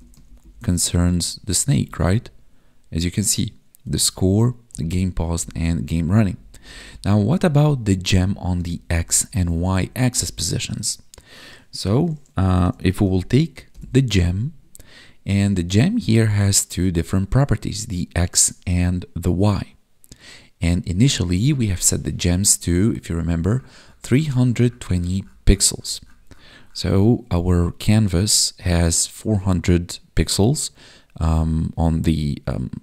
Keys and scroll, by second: 0.1 ctrl+Left, 0.7 Right, 1.4 Left, 3.7 Up, 6.0 Down, 8.1 Up, 8.6 ctrl+Right, 9.7 Right, 10.5 ctrl+s.